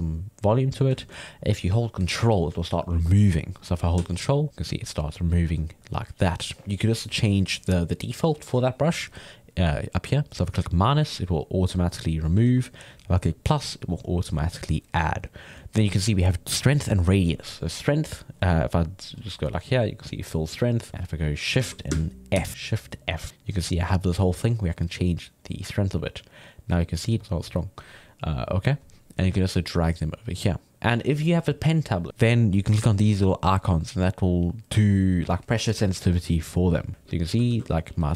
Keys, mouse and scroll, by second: 0.7 middle click, 1.0 ctrl+z, 1.3-3.1 middle drag, 3.1-5.7 drag, 5.7-8.7 middle drag, 9.7 click, 10.8 middle click, 11.2-12.5 drag, 12.5 ctrl+z, 13.1 click, 13.7-16.7 drag, 17.6-19.2 middle drag, 19.2-20.7 drag, 20.7-22.4 middle drag, 22.4 shift+f, 26.0 middle click, 26.5 click, 27.2 middle click, 27.5-30.5 drag, 33.4 click, 34.3 click, 36.5 middle click, 36.8 click, 37.5 ctrl+z, 37.9 f.